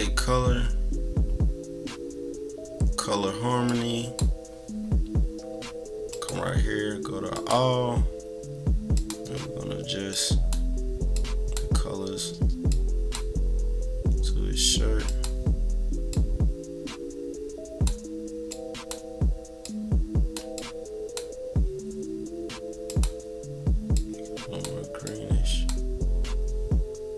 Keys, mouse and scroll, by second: 3.6 click, 6.1 click, 7.3 click, 8.0 scroll down 2, 8.9 click, 10.1 click, 11.1 click, 12.7 click, 15.1 click, 16.1 click, 18.5 click, 19.6 click, 20.5 click, 22.8 click, 23.9 click, 25.0 click.